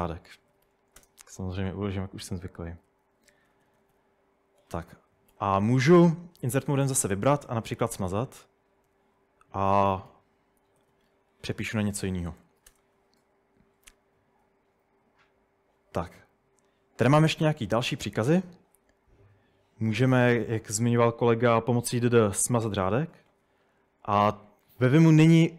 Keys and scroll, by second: 0.3-1.2 typing, 2.7-3.8 typing, 5.1-11.0 typing, 11.3 Escape, 12.2-12.9 typing, 20.9-21.5 typing, 22.9 typing.